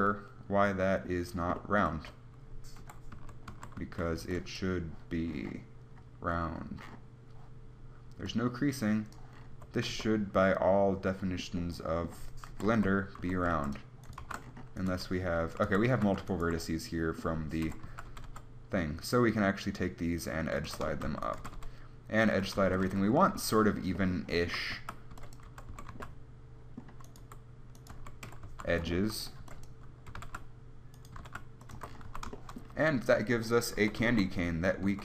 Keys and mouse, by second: 2.2 Tab, 3.1 KP_1, 3.4 a, 4.1 z, 4.5 b, 9.8 Tab, 10.2 z, 12.8 KP_1, 12.9 Tab, 13.5 a, 13.8 ctrl+r, 14.5 ctrl+z, 15.1 g, 15.9 a, 16.1 z, 17.9 KP_1, 18.1 z, 18.3 g, 20.9 a, 20.9-22.5 drag, 21.5-22.5 right drag, 21.7 g, 22.1 middle click, 23.1 a, 25.0-26.2 typing, 27.5-30.3 typing, 31.4 g, 32.0 Tab, 32.3 z, 33.5 Tab, 34.1 Tab.